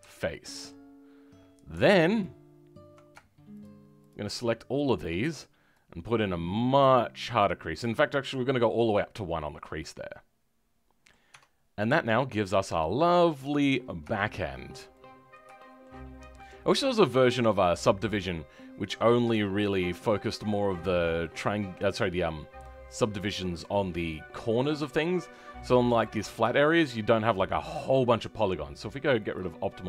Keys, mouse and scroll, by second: 0.3-2.1 middle drag, 2.1 alt+click, 5.7-8.2 drag, 8.2-11.2 middle drag, 11.2 Tab, 11.5 scroll down 4, 11.7 middle click, 11.9 middle click, 12.8 middle click, 13.6-14.1 scroll up 2, 14.1 shift+middle click, 14.5 scroll down 4, 16.0 scroll up 2, 16.3 middle click, 21.2 middle click, 24.5-24.9 scroll down 3, 24.9 shift+middle click, 25.3-25.7 scroll up 5, 25.7-29.1 middle drag, 29.1-29.8 drag.